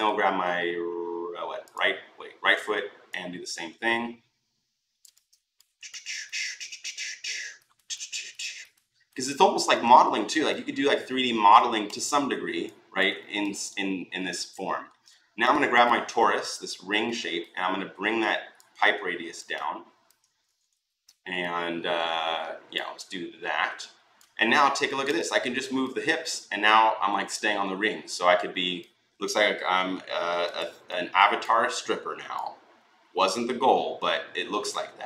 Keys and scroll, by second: 20.5 e.